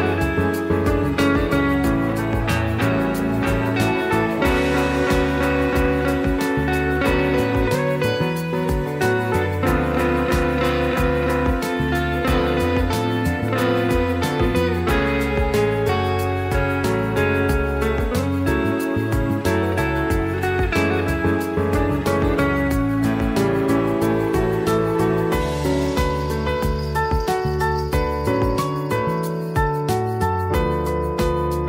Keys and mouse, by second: 0.1 click, 0.8-1.2 middle drag, 1.3 middle drag, 1.6 click, 1.7 middle drag, 2.0 click, 2.1 Tab, 3.0 e, 5.2 click, 6.6 ctrl+z, 7.1 e, 8.3 ctrl+z, 8.7 e, 9.5 s, 11.1 middle click, 12.9 ctrl+r, 15.4 ctrl+r, 17.2 click, 17.9 Tab, 18.3 click, 19.0 drag, 19.4 click, 19.8 r, 20.9 s, 21.7 click, 22.2-22.7 drag, 22.9-23.5 drag, 23.7 middle click, 24.2-25.1 drag, 25.6 click, 26.0 shift+middle click, 27.0-27.6 drag, 27.7 middle click, 28.3 middle drag, 29.2 shift+middle click, 29.7-30.0 drag, 30.1-30.4 middle drag, 31.3 r.